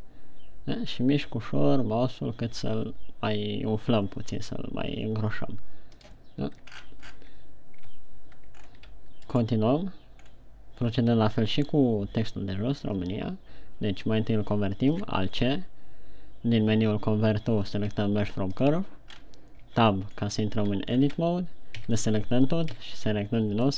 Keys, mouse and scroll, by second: 6.6 click, 7.0-7.8 shift+scroll down 10, 8.4 Tab, 9.0-9.4 shift+scroll down 2, 9.6 right click, 15.3 alt+c, 19.7-20.3 scroll up 3, 20.3 Tab, 20.6 scroll down 1, 21.6 shift+scroll down 2, 22.4 a, 23.2 a.